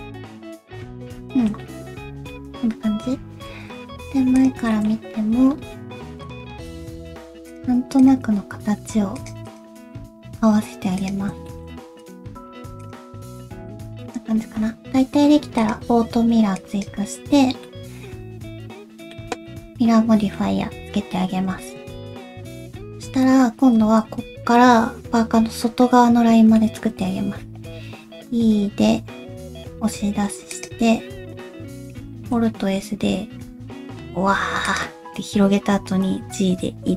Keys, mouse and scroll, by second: 0.0 click, 0.1 g, 0.7 scroll down 1, 0.8 middle click, 1.3 shift+middle click, 1.6 middle click, 2.9 KP_1, 3.3-3.6 scroll up 2, 3.7 alt+z, 4.3 click, 4.7 shift+middle click, 4.8 scroll up 1, 5.3 g, 6.7 click, 6.9 g, 8.0 click, 8.2 g, 9.4 click, 9.8 g, 11.4 shift+middle click, 12.0 click, 12.3 g, 13.1-13.4 scroll down 1, 13.5 alt+z, 13.6 shift+middle click, 14.3 Tab, 15.6 click, 17.1-17.6 scroll up 3, 17.6 middle click, 19.4 middle click, 20.8 KP_1, 21.1 scroll up 1, 21.4-21.7 scroll down 1, 21.9 shift+middle click, 22.4 Tab, 22.4 a, 26.5 shift+middle click, 27.8 e, 32.1 alt+s.